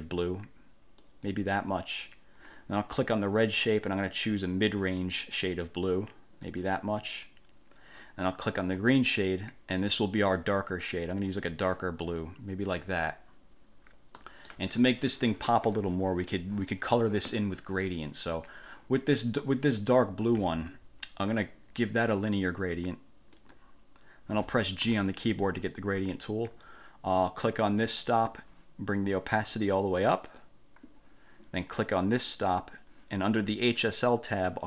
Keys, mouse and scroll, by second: 1.2 click, 3.4 click, 5.0 click, 6.6 click, 9.0 click, 11.7 click, 14.4 middle click, 19.6 click, 20.6 ctrl+z, 23.6 click, 25.0 g, 28.0 click, 29.7-30.8 drag, 32.5 click, 34.0 click.